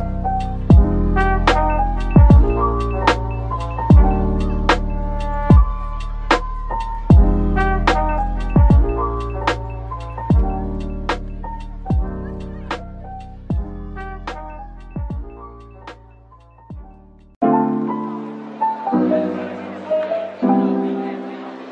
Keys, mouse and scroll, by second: 2.3-2.6 typing, 7.9-8.2 typing, 12.6-13.5 typing, 14.9-15.7 scroll down 1, 15.7 typing, 16.2 scroll down 1, 17.0 typing, 18.6 Tab, 19.3 typing.